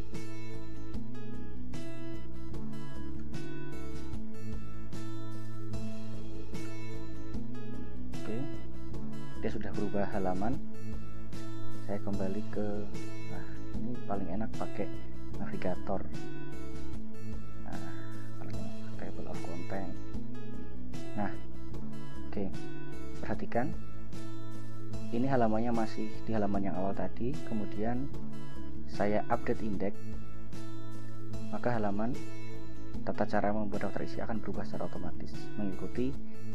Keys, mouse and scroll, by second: 3.3 ctrl+Return, 6.1 ctrl+Return, 6.8 ctrl+Return, 8.4 ctrl+Return, 14.2 click, 16.3 click, 18.1 scroll down 2, 19.3 click, 22.1 click, 30.8 click.